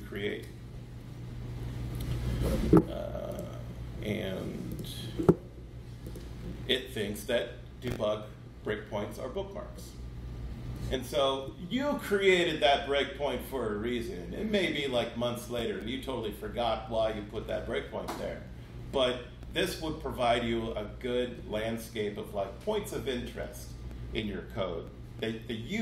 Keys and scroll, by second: 0.2 super+7.